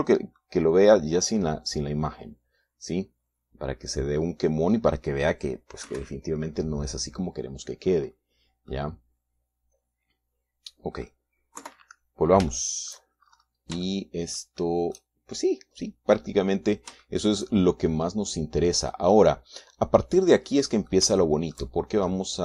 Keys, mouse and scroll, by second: 1.8-6.9 middle drag, 7.3 KP_1, 9.1-9.5 scroll up 2, 9.5 scroll down 2, 10.1-12.7 middle drag, 13.0 KP_3, 13.9 shift+middle click, 14.7-15.1 shift+scroll up 1, 15.3 shift+middle click, 18.5 shift+middle click, 19.3-20.5 middle drag, 20.7-22.4 middle drag.